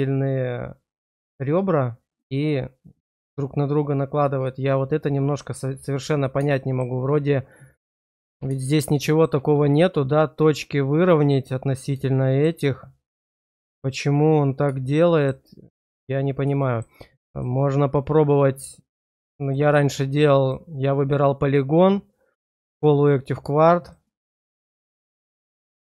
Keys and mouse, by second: 4.7 click, 6.5 shift+click, 8.9 click, 12.0 click, 13.7 shift+middle click, 14.9 shift+click, 16.6 shift+click, 21.4-23.9 right drag, 25.6-25.8 drag.